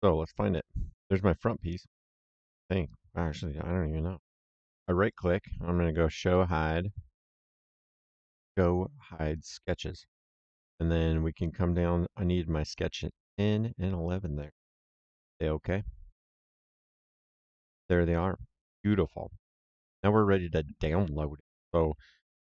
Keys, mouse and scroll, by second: 3.4 right click, 9.2 click, 12.6 click, 14.5 click, 18.6 middle click, 20.1 middle click.